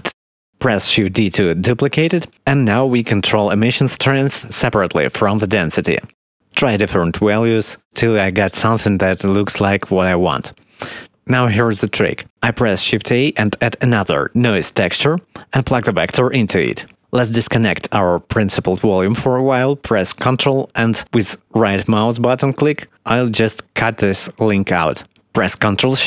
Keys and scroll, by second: 2.7 shift+d, 6.7 2, 9.0 3, 13.0 shift+a.